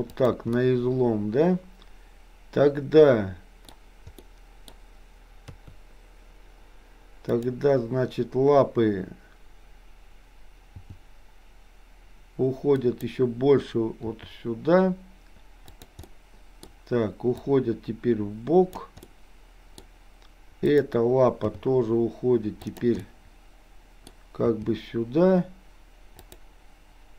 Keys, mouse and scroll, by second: 0.6-4.8 middle drag, 3.6-4.1 scroll down 1, 5.5 KP_3, 7.4 click, 10.6 g, 14.1 r, 16.0 middle click, 17.4-18.9 drag, 19.1-19.8 scroll up 1, 20.8 click, 21.5 g, 23.0-24.1 middle drag, 24.5 g.